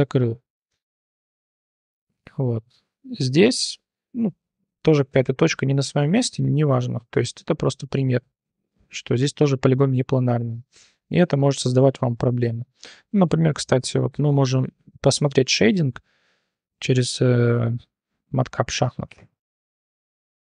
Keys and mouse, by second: 0.8 shift+drag, 2.1 1, 2.6-3.8 drag, 4.2 click, 4.9 g, 10.7 Tab, 11.2-12.4 drag, 13.0-13.3 drag, 14.1 click, 14.5-18.3 drag, 18.5-19.0 drag, 19.7-20.1 drag, 20.4-20.5 drag.